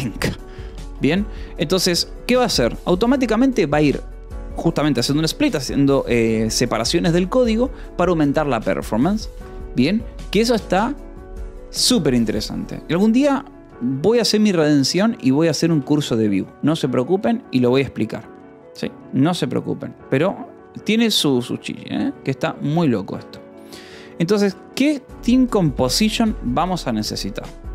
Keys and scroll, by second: 0.0-1.3 typing, 1.5 Escape, 2.4 ctrl+s, 9.0 j, 9.9 ctrl+s, 13.6 o, 13.9 Return, 15.6 space, 16.8 space, 22.9-26.4 typing, 26.1 Escape.